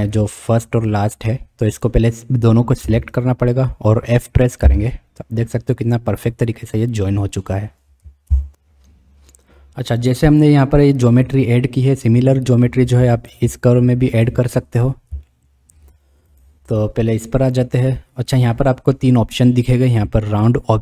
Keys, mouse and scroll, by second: 0.6 click, 2.8 b, 4.6 f, 8.3 ctrl+z, 13.2 click, 14.2 click, 15.3-15.8 shift+middle drag, 16.3 click.